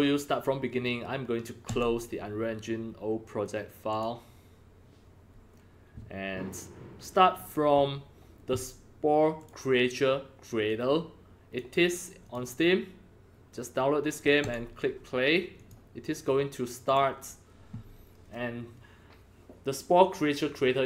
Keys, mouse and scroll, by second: 1.6 click, 3.9 click, 4.6 middle click, 9.3 click, 10.6 click, 12.2 click, 14.4 click, 15.5 click, 16.8 click, 19.2 click.